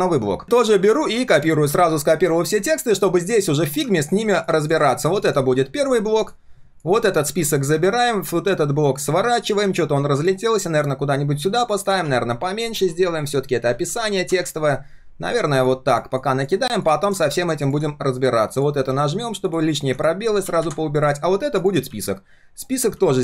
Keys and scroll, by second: 1.8 ctrl+c, 5.4 ctrl+v, 7.2 ctrl+x, 21.8 ctrl+v, 22.9 ctrl+a.